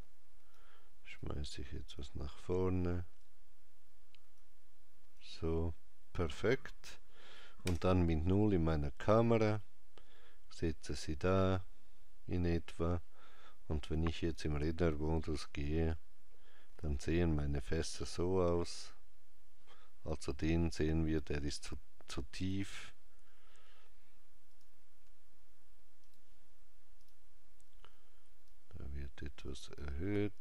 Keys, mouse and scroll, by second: 7.4 KP_0, 14.0 click, 24.3 click, 26.8 click.